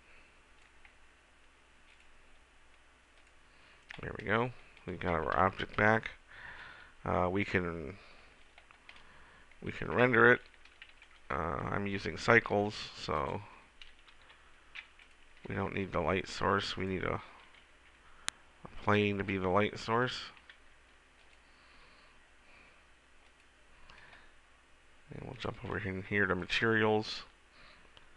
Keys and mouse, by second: 1.0-2.0 middle drag, 5.5 a, 12.7 Tab, 14.4 Delete, 15.2 middle click, 15.9 shift+a, 17.7 g, 19.2 click, 20.5 g, 21.9 s.